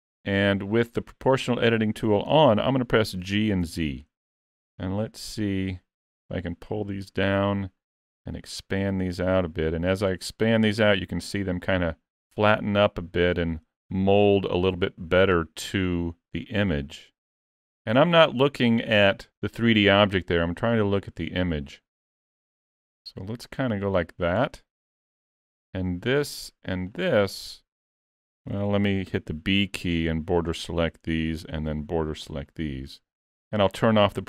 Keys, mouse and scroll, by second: 3.2 g, 25.6 click, 26.9 shift+click, 28.6 alt+a, 29.1 b, 31.5 b, 33.4 o.